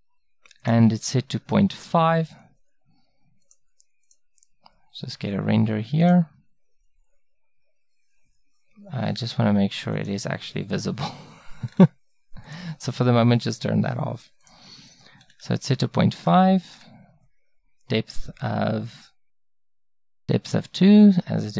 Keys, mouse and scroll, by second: 0.7-2.5 drag, 4.8-19.7 middle drag.